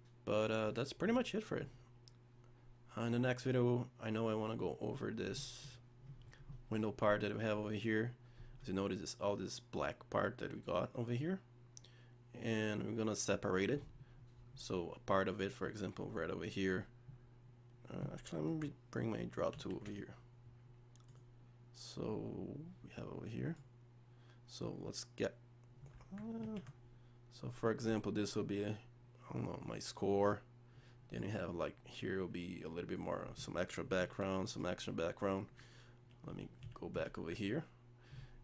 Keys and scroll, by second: 26.4 z, 36.3 z.